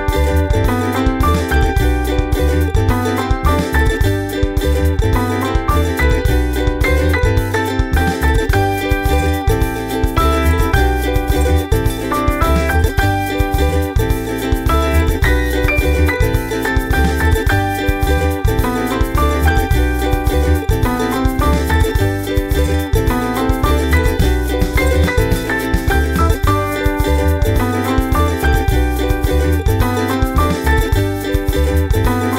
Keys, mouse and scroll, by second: 0.0 click, 0.5-1.9 drag, 2.2-4.2 drag, 4.3 ctrl+scroll up 2, 4.7 click, 4.9-5.4 ctrl+scroll down 4, 8.4 ctrl+s, 8.7 click, 9.6 click, 10.1 ctrl+c, 10.6 click, 12.6 click, 13.0 click, 13.8 ctrl+v, 15.0 click, 16.1-18.1 typing, 18.1 ctrl+scroll up 2, 19.2 click, 19.7-21.0 drag, 21.1 click, 21.4 click, 22.0 click, 22.2 ctrl+scroll down 2, 22.6 middle click, 23.7 ctrl+scroll up 2, 26.3 ctrl+scroll down 2, 31.5 click.